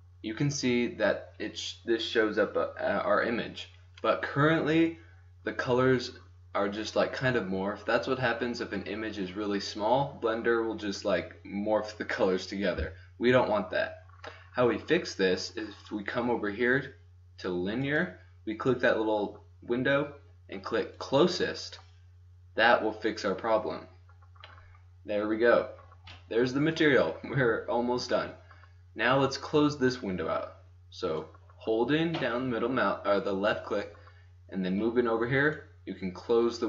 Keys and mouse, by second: 2.8 middle click, 3.9 middle click, 17.9-19.9 drag, 23.2 middle click, 24.7-31.2 middle drag, 31.2-32.7 drag, 35.9 middle click.